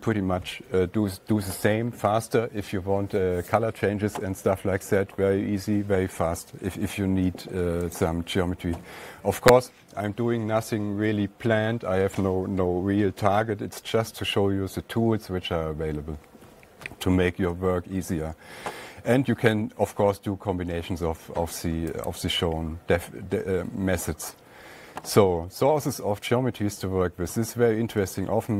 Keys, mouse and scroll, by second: 0.0-0.5 typing, 1.1-3.2 drag, 8.4-13.5 drag, 16.8-21.6 drag, 17.0 alt+Tab, 22.6 click, 27.8 alt+Tab.